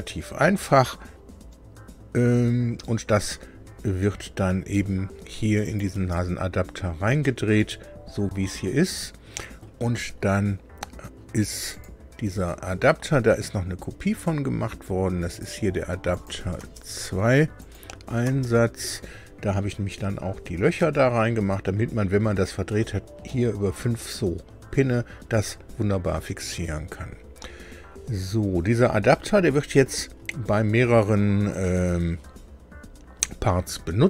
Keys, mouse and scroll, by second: 5.6 click, 5.9 space, 7.2-9.8 middle drag, 11.7 click, 15.3 click, 16.1 click, 16.5 space, 17.5 click, 18.2 space, 20.3 scroll up 2, 20.7-22.8 middle drag, 23.2 middle click.